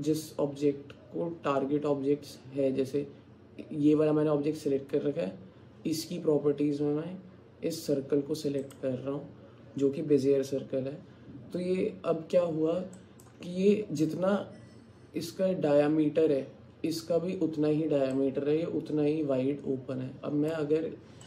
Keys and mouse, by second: 13.0 alt+click, 18.2-20.6 alt+drag.